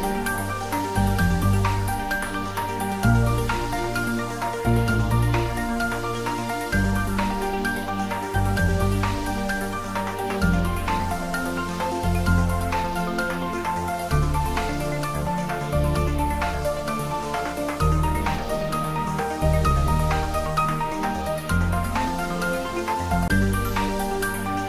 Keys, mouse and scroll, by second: 5.2 click, 11.0 click, 15.4 click, 18.8 click, 21.6 click.